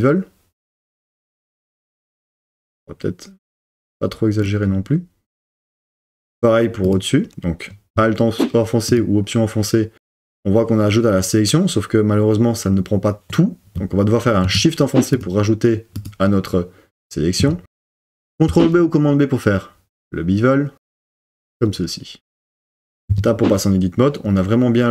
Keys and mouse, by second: 4.5 click, 15.9 alt+shift+click, 18.5 super+b, 21.1 click, 23.1 Tab.